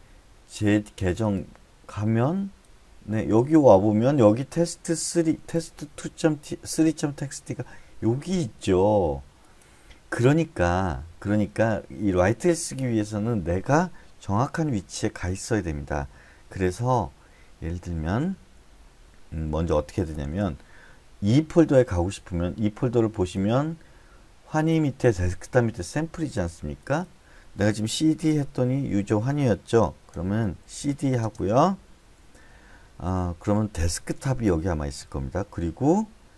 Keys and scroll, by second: 20.1 typing, 27.7-28.5 typing, 30.1-31.2 typing, 33.7-35.0 typing.